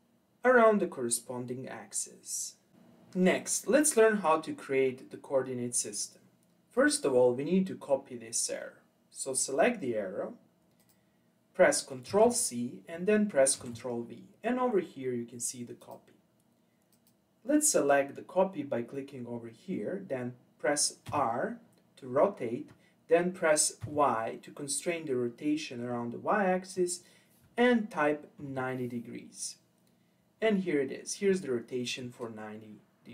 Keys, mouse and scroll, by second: 3.3-4.0 scroll down 3, 4.0-6.7 scroll up 1, 6.7 click, 10.8 click, 12.1 ctrl+c, 13.6 ctrl+v, 15.8 click, 16.9 click, 21.0 r.